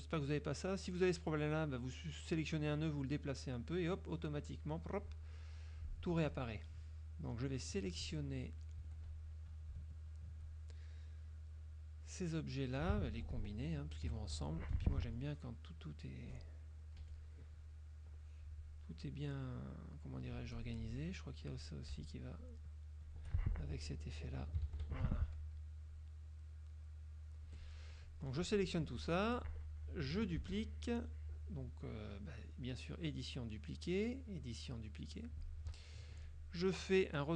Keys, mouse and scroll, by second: 5.6 click, 6.2 F1, 6.4 click, 8.9 F2, 9.1 click, 9.9 shift+click, 15.0 k, 15.8 click, 17.1 F1, 18.2-19.3 drag, 20.6 click, 20.8 F2, 21.6 click, 22.2 shift+click, 22.6 shift+click, 23.2 shift+click, 25.4 k, 26.0-27.4 drag, 27.6 F1, 28.4 click, 30.5 ctrl+d, 34.4 click, 35.8 Escape.